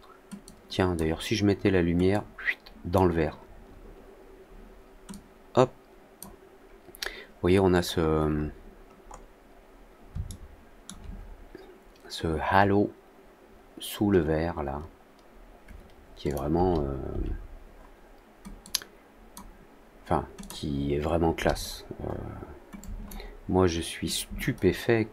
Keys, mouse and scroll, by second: 0.4 click, 2.0-2.9 drag, 5.0-6.1 drag, 7.8 middle click, 8.3 middle click, 9.0 middle click, 10.2 alt+middle click, 16.2 click, 18.5 click, 20.3 click, 22.7 click, 24.0-25.1 shift+drag.